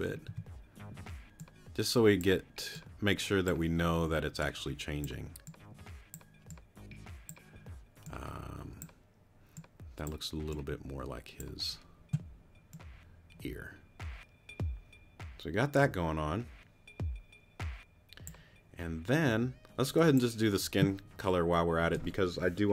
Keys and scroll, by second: 0.3 t.